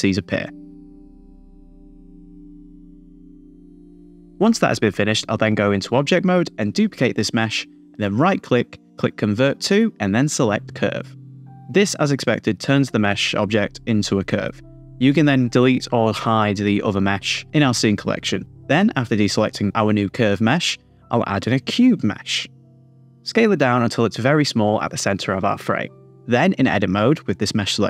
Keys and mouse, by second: 0.0-3.7 typing, 0.3 click, 0.7 middle click, 1.1 middle click, 1.3 click, 1.5 middle click, 1.7 click, 2.7 middle click, 3.8 Tab, 3.9 Tab, 5.2 click, 5.9-6.5 middle drag, 8.3 shift+d, 9.4-11.6 drag, 18.8 click, 20.0 shift+a, 22.3 s, 24.2 click, 24.4 middle click, 24.8 s, 25.8 click, 26.2 middle click, 27.3 click, 27.7 a, 27.7 s, 27.7 y.